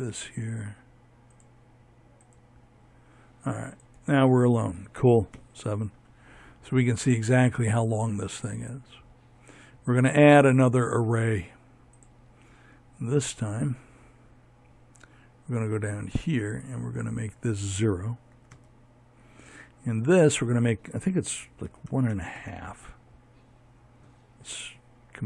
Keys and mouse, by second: 3.0 right click, 3.2 KP_7, 9.0-13.7 drag, 19.0-22.7 drag.